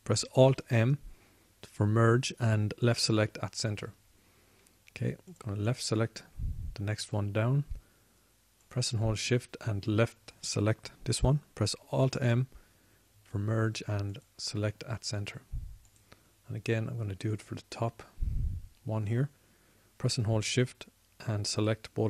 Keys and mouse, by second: 1.7 alt+m, 6.7-13.2 drag, 13.2 alt+m, 15.7 alt+m.